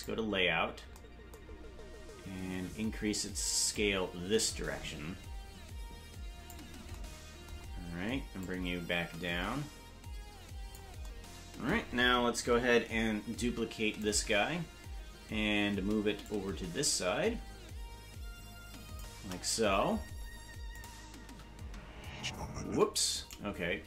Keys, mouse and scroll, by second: 0.0 click, 0.0 scroll down 1, 1.5-1.9 scroll up 3, 3.7-6.5 drag, 8.4-10.8 drag, 13.5 shift+d, 16.2-19.0 shift+drag, 20.8 click, 21.2 space, 22.7 space, 23.1 right click.